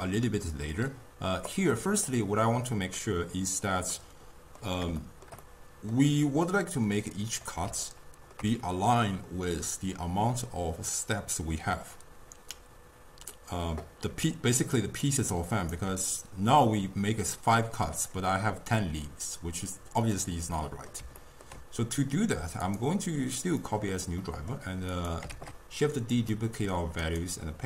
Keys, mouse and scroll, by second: 1.5-3.0 drag, 3.0-7.2 middle drag, 7.2 click, 7.9-10.9 ctrl+middle drag, 14.2-15.9 typing, 14.3 click, 14.8 click, 15.4 right click, 20.6-22.7 middle drag, 22.7-24.2 right drag, 24.2 middle click, 25.0 click, 25.3 shift+d, 26.3 middle click, 27.0-27.6 right drag.